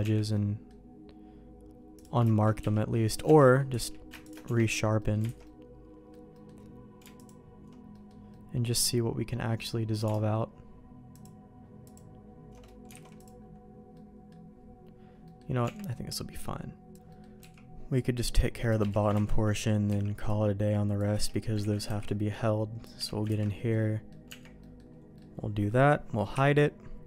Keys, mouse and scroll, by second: 0.0 Tab, 0.3 middle click, 1.9 click, 2.6 q, 3.2 Tab, 3.7 q, 4.4 Tab, 5.0 middle click, 5.3 alt+a, 5.4 middle click, 6.3 middle click, 7.9 middle click, 8.3 middle click, 12.9 alt+a, 13.1 click, 13.9 middle click, 15.2 middle click, 15.6 Tab, 15.9 middle click, 16.9 alt+a, 17.1 middle click, 18.1 c, 19.1 ctrl+x, 19.3 middle click, 19.8 c, 21.6 ctrl+x, 21.8 c, 23.4 ctrl+x, 23.7 middle click, 24.2 Tab, 24.6 middle click.